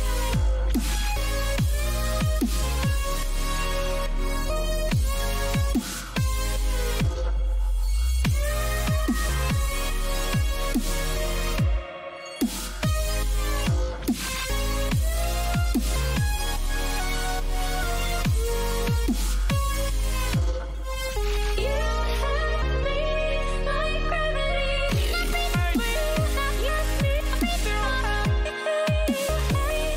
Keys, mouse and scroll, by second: 1.4 a, 2.5 middle click, 2.8-8.5 middle drag, 5.2 z, 11.6-29.9 middle drag.